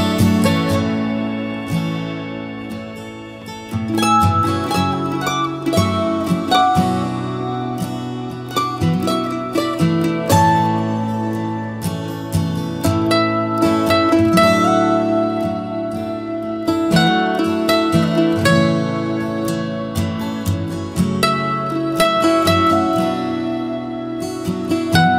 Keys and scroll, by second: 12.7 Down, 14.1 Left, 14.6 Down, 15.1 Right, 16.5 Down.